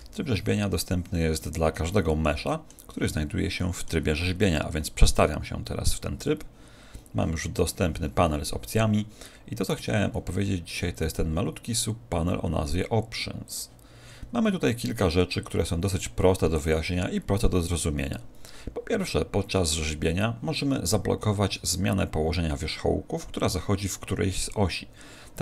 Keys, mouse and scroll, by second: 1.7-4.9 middle drag, 4.9 click, 5.3 middle click, 13.4 click.